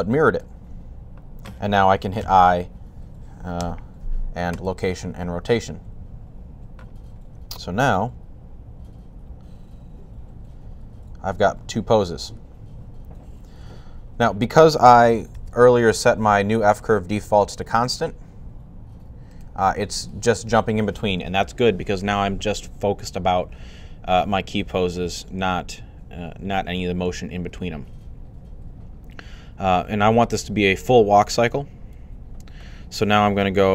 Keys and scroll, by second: 2.1 typing, 5.5 typing, 15.2 super+,.